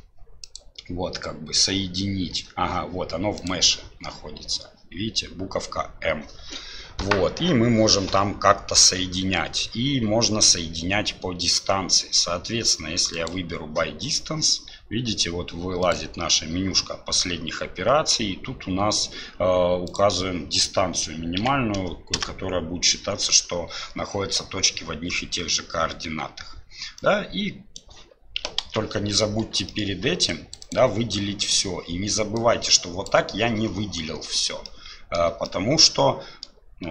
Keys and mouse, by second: 0.5-2.8 drag, 3.3-13.3 drag, 19.9-22.8 drag, 27.0 click, 28.6 ctrl+z, 29.7 shift+click, 32.3 click, 34.6 middle click, 35.4-36.4 middle drag.